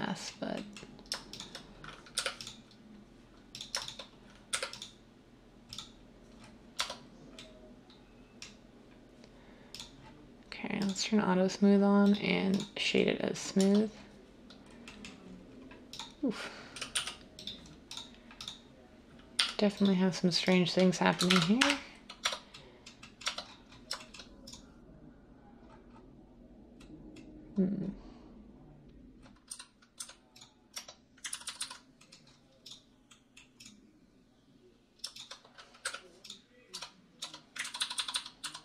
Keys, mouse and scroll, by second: 2.1 m, 4.5 m, 6.8 Tab, 13.6 Tab, 16.9 g, 19.4 g, 21.2-22.2 typing, 23.2 Tab, 23.7-24.5 typing, 29.5-30.7 typing, 31.3 ctrl+z, 31.4 ctrl+z, 31.6 ctrl+z, 35.8 m, 36.7 Tab, 37.2 Tab, 37.6 ctrl+z, 37.8 ctrl+z, 38.0 ctrl+z.